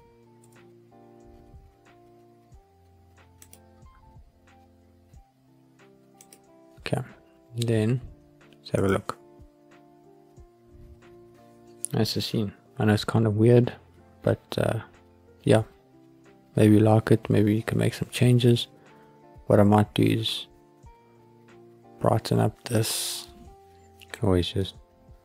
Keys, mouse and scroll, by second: 0.4 g, 3.4 click, 3.9 s, 6.1 click, 7.0-10.1 scroll down 4, 10.1 click, 10.8 scroll up 1, 23.6 click, 23.6 scroll up 1, 24.0-25.2 middle drag.